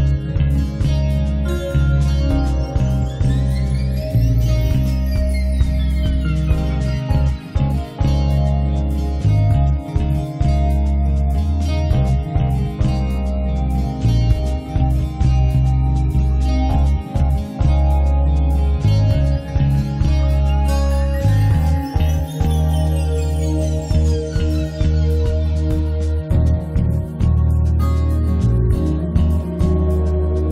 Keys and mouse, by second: 0.5 right click, 0.7 z, 0.8 z, 1.0 ctrl+a, 1.5 a, 2.8 KP_5, 3.9-5.7 middle drag, 5.7 KP_5, 6.2 click, 7.3-8.9 middle drag, 9.6-13.1 middle drag, 12.1 ctrl+s, 13.7 click, 13.9 alt+F3, 14.2 right click, 14.7 middle click, 15.5 click, 16.1 click, 16.9 middle click, 17.5 click, 19.3 click, 19.6 click, 20.1 middle click, 20.3 KP_Decimal, 20.5 middle click, 20.8 click, 21.4 middle click, 21.5-23.8 drag, 23.8 middle click, 23.9-25.2 drag, 25.2 middle click, 25.3-27.0 drag, 25.5 middle click, 26.3-29.3 middle drag, 27.4-28.7 drag, 28.7 right click, 28.9-30.5 drag, 28.9 right click.